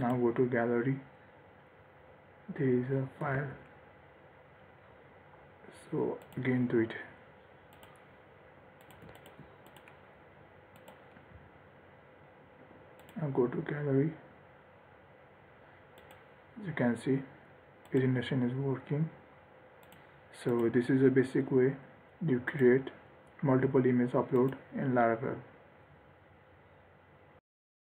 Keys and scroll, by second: 3.7 ctrl+r.